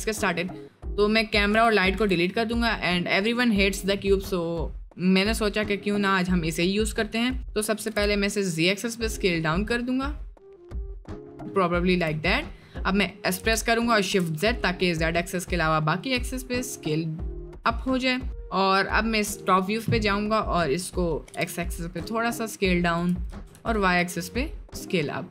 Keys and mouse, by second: 1.5 Delete, 1.8 click, 2.6 Delete, 2.6 click, 6.2 click, 7.9 s, 12.2 middle click, 13.3 s, 19.6 right click, 21.2 s, 23.2 s.